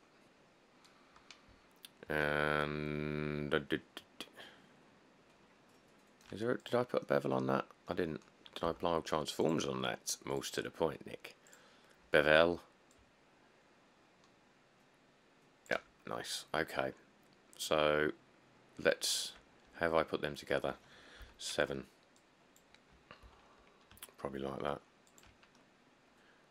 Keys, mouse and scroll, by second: 1.7 scroll, 8.9 q, 16.4 middle click, 16.5 middle click, 16.6 middle click, 16.7 middle click, 21.5 7, 23.5 g.